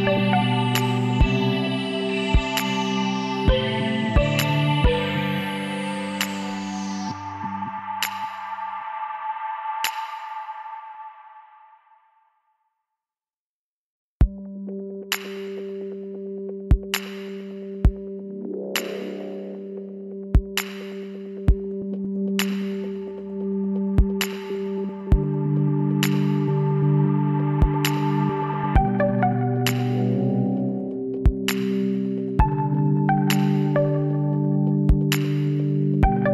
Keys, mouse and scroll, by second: 1.3 middle click, 1.8 click, 1.9-4.4 right drag, 4.6-6.5 drag, 6.0 s, 8.8 w, 12.1 Tab, 12.5 middle click, 15.0 Tab, 17.8 ctrl+z, 18.5 ctrl+z, 19.4 w, 27.8-29.5 middle drag, 29.5 Tab, 30.5 middle click, 32.5 middle click, 33.3-36.3 middle drag.